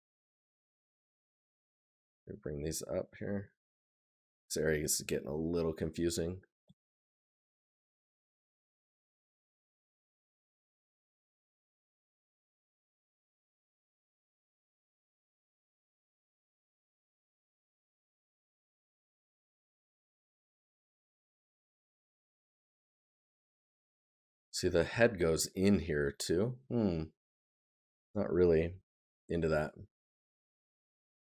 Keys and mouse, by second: 8.0 right click, 20.8 right click, 23.2 right click, 24.8 right click.